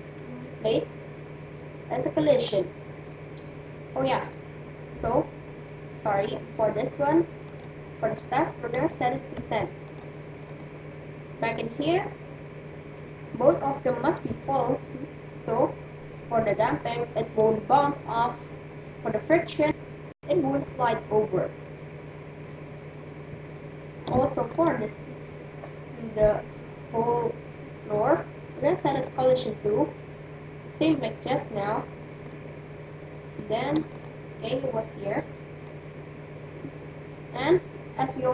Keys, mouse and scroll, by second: 0.1-1.4 right drag, 2.4-4.2 drag, 4.8-6.0 right drag, 7.5-9.4 drag, 11.2-12.4 right drag, 22.0-25.3 middle drag, 24.7-26.4 right drag, 29.0-31.0 drag, 32.0-34.4 middle drag, 34.4-35.8 right drag, 35.2-37.8 middle drag.